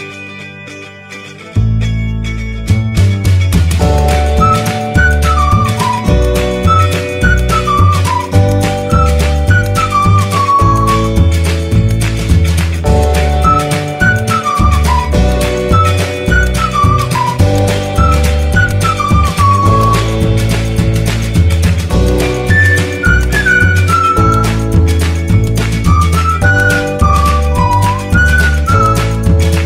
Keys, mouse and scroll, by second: 11.8-16.8 drag, 21.7-24.9 drag, 24.9 click, 26.3 right click, 27.6-29.6 drag.